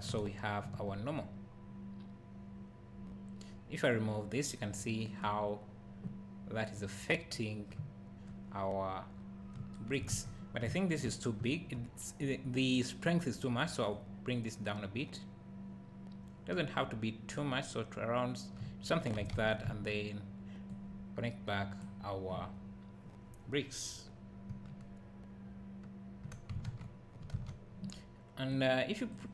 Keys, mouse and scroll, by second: 4.5-7.8 drag, 7.8 `, 14.0-29.3 drag, 23.3 scroll up 1, 24.7 `, 27.0-27.3 scroll down 1, 27.3 ctrl+s.